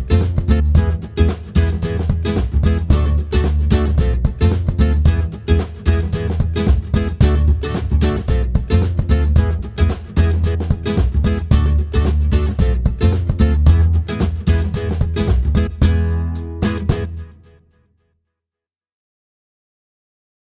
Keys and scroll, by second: 15.8-17.0 typing.